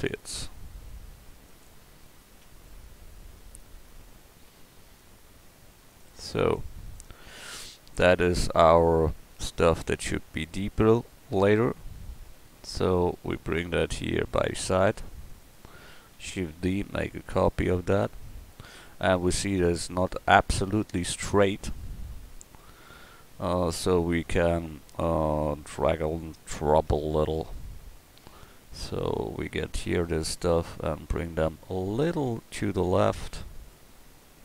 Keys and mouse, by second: 0.0 click, 0.2 g, 1.9 middle click, 3.5-4.9 drag, 4.5 g, 7.4 Tab, 15.2 drag, 15.3-16.5 middle drag, 16.5 shift+d, 16.9-18.3 drag, 19.4-20.9 drag, 26.9 Tab, 34.2-34.4 drag.